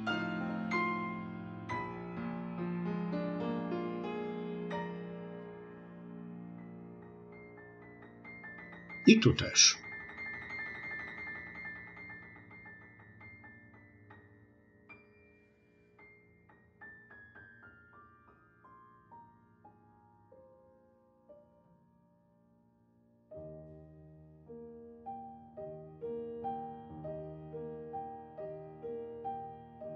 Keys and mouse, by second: 0.7 click, 1.5 click, 2.2 click, 3.1 click, 3.7 click, 4.5 click, 5.4 click, 10.7 ctrl+r, 12.5 click, 12.6 click, 12.8 click, 13.1 click, 13.4 middle click, 13.8 click, 14.2 click, 14.9 click, 15.4 click, 15.9 click, 16.3 click, 16.6 click, 16.9 middle click, 18.1 click, 18.5 click, 19.0 middle click, 19.3 click, 19.7 middle click, 20.2 click, 20.6 middle click, 21.3 click, 21.6 click, 22.9 f, 23.2 click, 24.2 f, 24.5 middle click, 24.8 click, 25.8 f, 26.0 middle click, 27.1 click, 27.4 click, 28.3 click, 28.7 click, 29.5 ctrl+r.